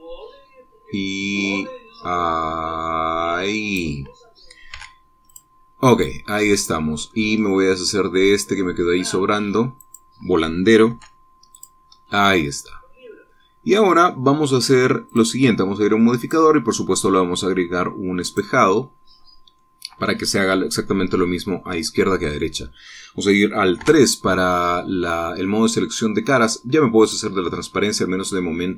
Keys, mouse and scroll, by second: 0.4-4.5 drag, 5.3 x, 5.9 click, 6.8-7.8 drag, 6.8-7.8 right drag, 8.0-8.3 scroll up 2, 10.4 click, 11.5 x, 12.1 click, 13.0-14.5 drag, 13.0-14.4 right drag, 15.7 click, 16.8 click, 18.8 click, 20.2 click, 22.8 click, 24.4 middle click, 24.4 3, 25.0-27.7 middle drag, 27.7 click, 27.9-28.7 middle drag.